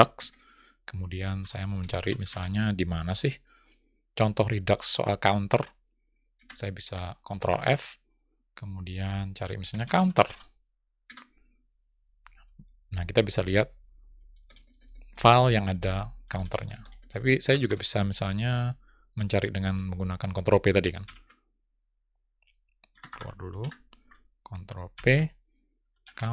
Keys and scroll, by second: 5.9 ctrl+f, 24.3 ctrl+p.